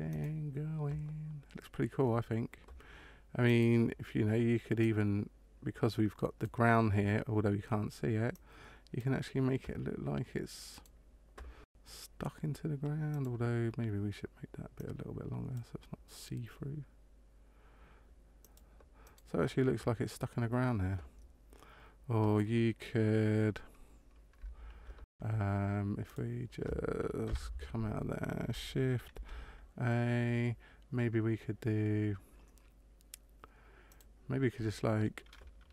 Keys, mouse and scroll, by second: 3.4 right click, 4.7 click, 8.2 click, 10.7 right click, 13.2 right click, 14.8 click, 18.4 click, 19.1 right click, 26.1 click, 27.2 KP_0, 29.1 shift+a.